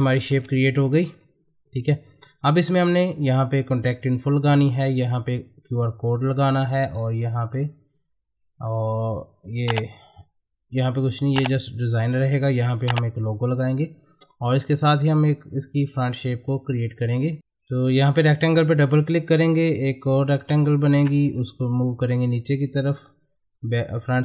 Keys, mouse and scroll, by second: 0.3 shift+F2, 1.1 click, 6.9-8.7 scroll down 1, 14.5-16.7 scroll down 1, 17.4-18.4 scroll down 1, 18.6 click, 19.3 space, 20.3 click, 20.7 space, 21.4 ctrl+click.